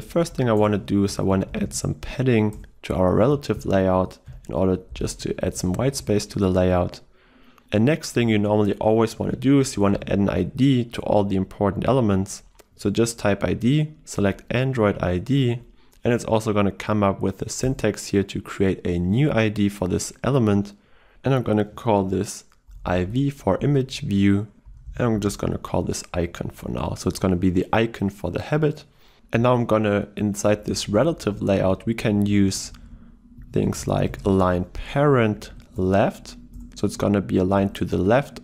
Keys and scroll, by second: 2.7 Return, 14.2 Return, 31.6 ctrl+w, 35.8 ctrl+w, 36.3 Return.